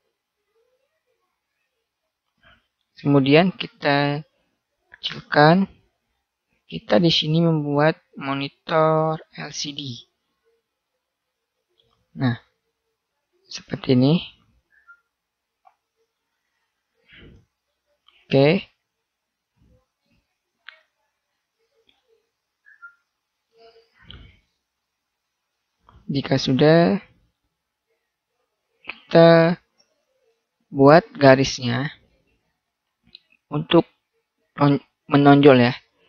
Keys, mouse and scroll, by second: 0.4-3.1 middle drag, 3.4-4.7 middle drag, 4.7 click, 4.8-6.0 middle drag, 7.6-9.4 middle drag, 9.4-10.5 drag, 11.9-14.0 middle drag, 16.1-18.0 drag, 20.5 right click, 21.4 middle click, 21.5 right click, 21.7-23.3 drag, 28.7-34.0 middle drag, 35.4-36.0 middle drag.